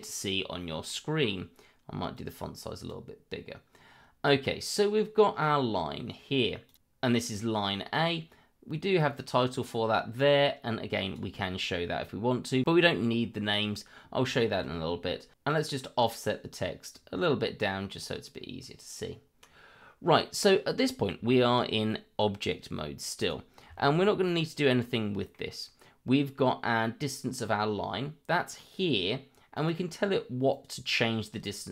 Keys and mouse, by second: 0.6 middle click, 2.1 click, 6.6 click, 9.0 click, 14.2 shift+middle click, 15.9 click, 17.2 click, 20.2 middle drag, 21.3 shift+middle drag, 23.2-23.6 right drag, 23.7 shift+middle drag, 24.1-25.3 middle drag, 29.5 click.